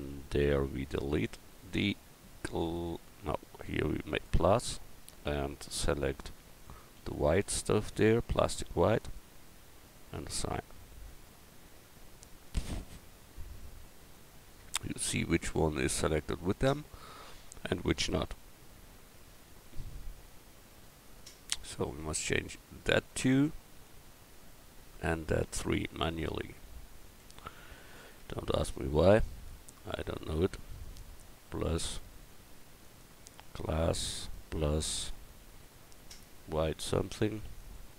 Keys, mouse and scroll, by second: 4.2-9.1 drag, 11.9 Tab, 12.5 Tab, 27.2 Tab, 27.9-33.6 drag, 28.2 Tab, 34.2-37.7 drag.